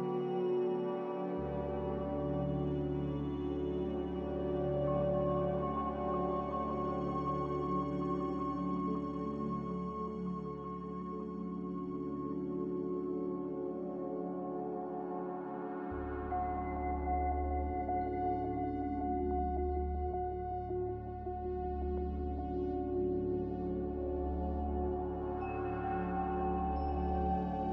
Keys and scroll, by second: 25.6 z, 26.4 a.